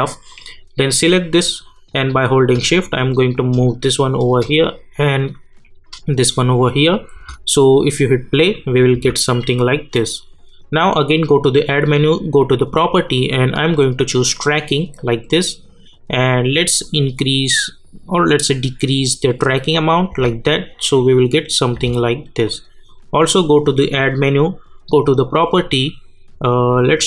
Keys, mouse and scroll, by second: 0.3-4.3 drag, 4.3-6.8 drag, 7.1 space, 9.2 click, 15.3 click, 15.7-16.8 scroll down 1, 16.8-20.1 drag, 20.1 space, 22.4 click, 26.3 a.